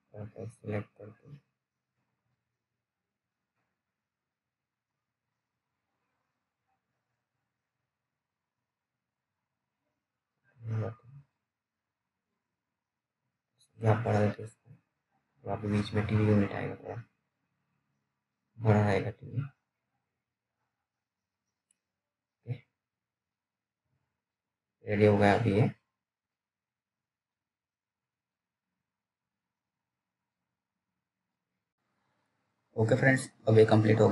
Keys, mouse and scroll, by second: 0.4 l, 1.6-2.0 typing, 2.7-4.2 scroll down 1, 4.2 click, 4.2 click, 4.7 z, 5.2-6.2 scroll down 1, 8.0 F3, 10.1 click, 10.6-11.5 scroll up 1, 11.6 click, 15.8-16.5 scroll down 1, 16.5 right click, 17.2 click, 17.8-18.6 scroll down 1, 18.7 alt+middle click, 19.4-19.7 scroll up 1, 19.9 alt+middle click, 23.0 click, 23.0 click, 26.9 click, 26.9 p, 28.4 alt+middle click, 29.0 scroll down 1, 29.2 middle click, 30.1-30.5 scroll up 1, 30.5 middle click, 32.7 F3, 33.6 right click.